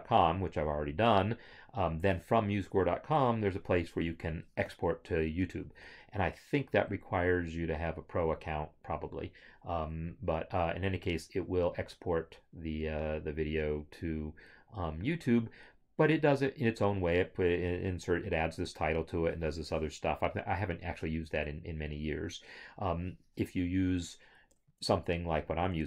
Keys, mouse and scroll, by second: 24.8 alt+Tab.